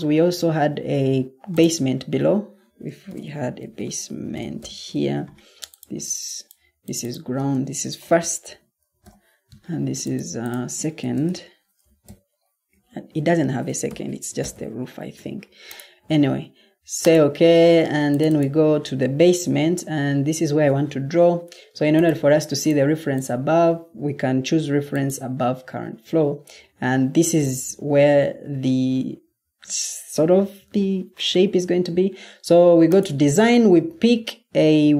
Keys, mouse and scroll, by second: 3.0-4.8 typing, 7.5-8.9 typing, 10.7-12.8 typing.